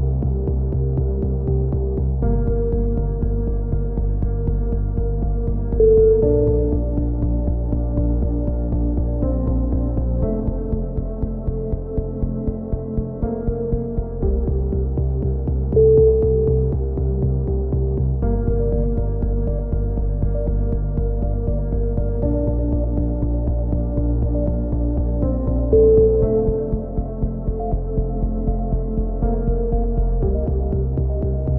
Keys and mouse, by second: 1.2 click, 1.8-2.8 right drag, 2.8 middle click, 2.9 right click, 3.5 shift+q, 3.6 a, 3.9 middle click, 4.0 click, 5.0 right click, 5.9 f, 6.0 a, 6.2 middle click, 7.3 middle click, 7.7 click, 8.4-9.6 middle drag, 9.0 right click, 9.8 f, 9.9 a, 10.3 KP_3, 10.7 z, 12.3 middle click, 12.4-13.4 drag, 13.4-14.8 middle drag, 14.8 click, 14.8 right click, 16.4 click, 17.6 a, 17.9 z, 18.1 middle click, 18.4 Tab, 18.9 a, 19.1 click, 20.3 click, 23.0 KP_3, 23.2 z, 23.7-25.6 drag, 26.7 Tab, 27.4-28.7 drag, 28.9-30.9 drag, 30.4 right click, 30.9 KP_3.